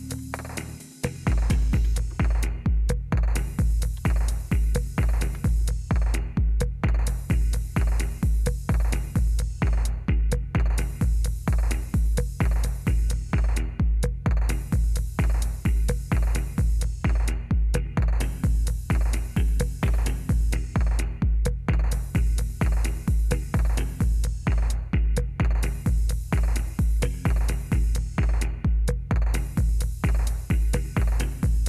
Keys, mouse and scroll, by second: 1.8 Return, 3.9 Return, 5.0 Right, 5.4 Return.